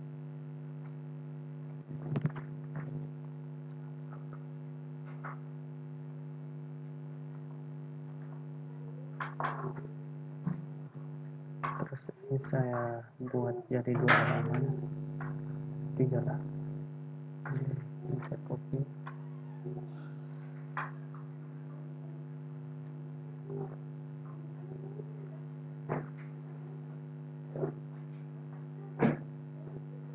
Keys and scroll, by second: 18.9 ctrl+c, 21.4 ctrl+v.